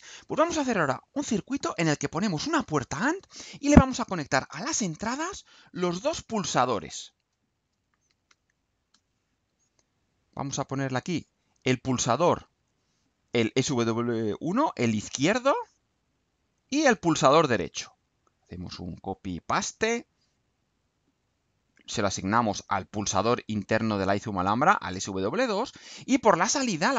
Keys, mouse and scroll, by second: 4.4 click, 5.3 click, 6.6-8.8 typing, 8.9 Return, 10.8 click, 11.7 click, 12.6 click, 15.9-17.0 drag, 17.3 click, 18.9 ctrl+c, 19.2 ctrl+v, 19.8-21.1 ctrl+drag, 21.3 click, 21.9 click, 22.8 click, 23.7-24.7 drag, 25.1-25.9 drag.